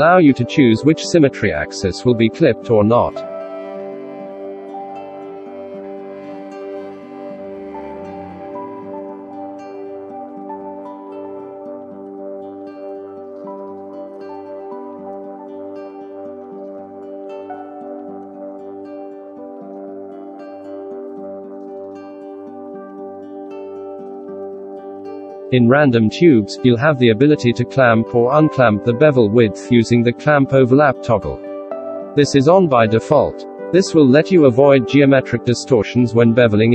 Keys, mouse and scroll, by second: 12.1 shift+middle click, 13.1 ctrl+z, 13.6 shift+q, 21.8-23.0 middle drag, 23.5 F9.